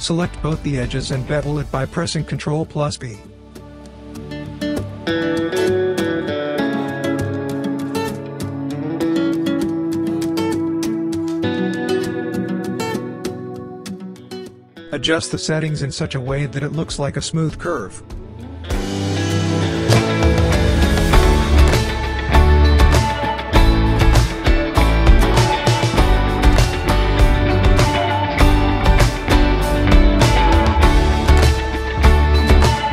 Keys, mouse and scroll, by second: 1.1 ctrl+b, 2.3 click, 4.7 typing, 7.7-9.6 drag, 7.7 typing, 12.5 click, 13.0-14.2 right click, 13.9 click, 14.2 scroll down 1, 14.5-15.7 alt+drag, 16.3-17.3 right click, 17.6 click, 17.9 space, 19.0 scroll down 1, 19.2-20.0 typing, 20.5-21.2 scroll up 1, 21.2-23.0 drag, 26.5-27.1 click, 27.2-28.1 right click, 28.1 space, 28.9 scroll up 1, 29.3-30.2 alt+click, 30.5 scroll up 1, 30.8-31.4 alt+click.